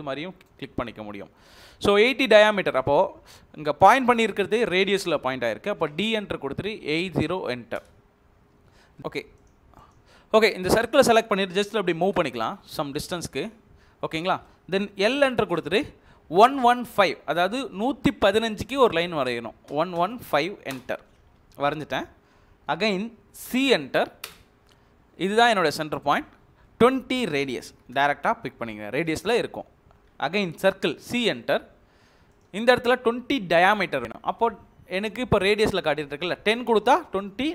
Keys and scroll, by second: 5.8-7.2 typing, 7.7 Return, 9.0 ctrl+z, 9.0 Escape, 9.0 Delete, 11.9 m, 12.0 space, 13.9 Escape, 15.2 l, 15.3 space, 19.4-20.7 typing, 21.1 Escape, 23.4 c, 24.2 space, 27.4-28.3 typing, 28.9 Return, 30.7 c, 31.2 space, 36.3-37.2 typing.